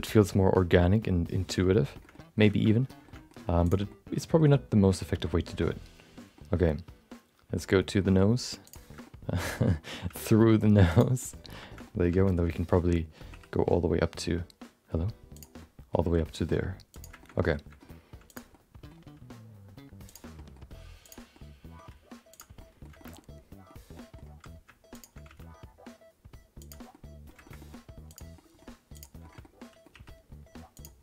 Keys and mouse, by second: 2.1 middle click, 2.7 middle click, 3.1 middle click, 3.6 click, 3.9 middle click, 4.4 middle click, 4.5 middle click, 6.3-8.0 middle drag, 8.1 e, 9.1 middle click, 9.6 middle click, 10.0 g, 11.3 middle click, 11.9 middle click, 12.2 middle click, 12.5 middle click, 14.7 middle click, 15.3 click, 15.6 middle click, 16.0 e, 17.4 middle click, 18.3 click, 18.6 middle click, 20.0 g, 20.3 middle click, 21.0 click, 21.3 middle click, 21.9 g, 22.7 middle click, 23.0 middle click, 23.2 middle click, 24.0 middle click, 24.9 shift+click, 25.2 g, 26.9 middle click, 27.6 middle click, 28.1 click, 28.3 middle click, 28.9 click, 29.2 middle click, 29.4 middle click, 29.9 e.